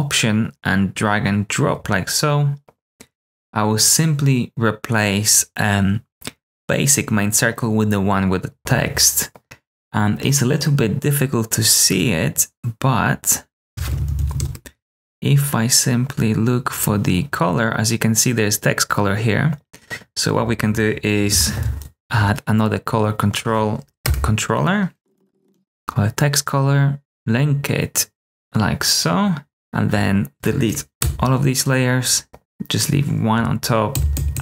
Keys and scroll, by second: 13.8-14.8 typing, 21.2 ctrl+space, 22.0 Return, 22.0 c, 24.0 Return, 24.7-25.8 typing, 31.0 BackSpace, 33.9 super+d, 34.1 super+d.